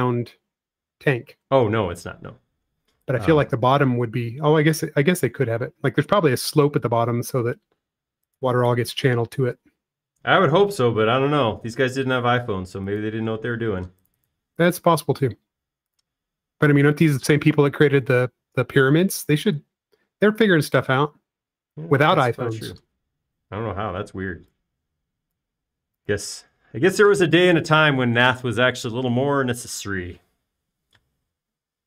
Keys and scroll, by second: 5.3 m, 8.4 space, 9.1 m, 14.9 space, 16.6 m, 22.5 space, 23.5 p, 24.8 Escape, 25.3 Escape, 26.8 space.